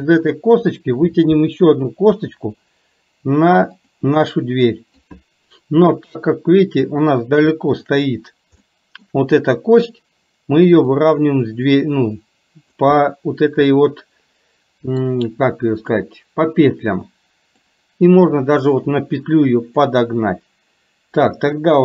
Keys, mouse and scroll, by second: 2.2 e, 4.4 middle click, 7.2 click, 7.9 shift+click, 8.7 shift+middle click, 11.0-12.8 drag, 13.1-15.2 middle drag, 16.8 click, 18.5-19.8 drag.